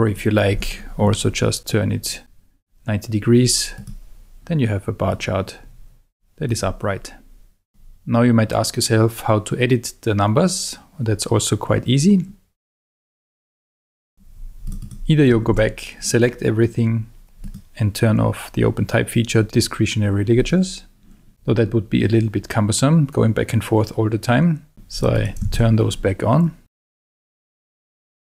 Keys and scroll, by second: 15.5 super+a, 21.3 ↺, 25.4 super+a.